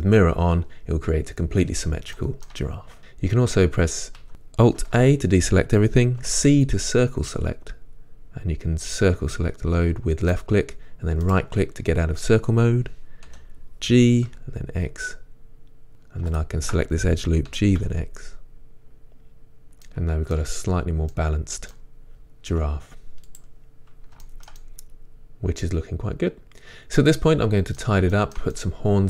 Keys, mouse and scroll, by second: 2.2 shift+middle click, 3.4 a, 4.9 alt+a, 6.6-11.3 middle drag, 6.6 c, 11.3 right click, 13.3 g, 15.9 click, 16.4 alt+click, 17.5 g, 19.6 click, 19.9 middle click, 22.0 middle click, 22.0-22.8 scroll down 2, 22.8-23.4 scroll down 1, 23.4-23.9 scroll down 1, 23.4 z, 23.9-24.2 scroll down 1, 24.1-28.3 shift+middle drag.